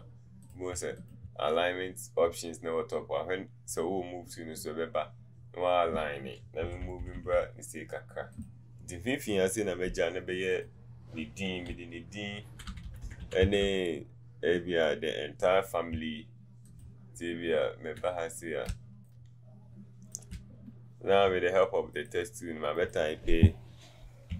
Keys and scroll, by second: 6.8 Left, 11.7 Down, 11.8-13.2 Down, 13.4 Down, 13.6 Down.